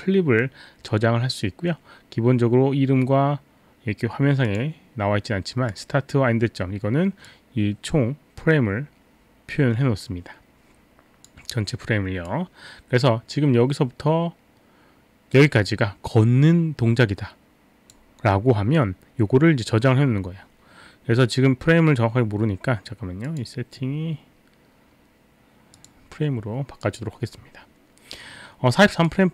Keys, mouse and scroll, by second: 4.4 click, 5.7 click, 7.3 click, 12.3 click, 23.2 click, 25.7 click, 26.8 click, 29.0 click.